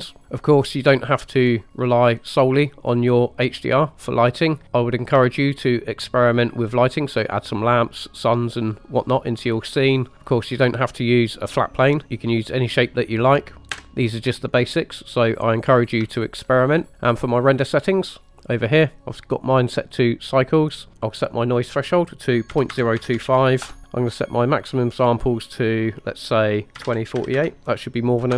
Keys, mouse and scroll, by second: 2.1-2.5 scroll down 1, 4.6-5.2 middle drag, 4.6 scroll down 1, 5.3-5.7 shift+middle drag, 9.7 middle click, 10.1 middle click, 13.8 KP_0, 16.2 shift+middle click, 20.3-20.9 scroll down 1, 21.9-23.8 drag, 24.8-28.3 drag.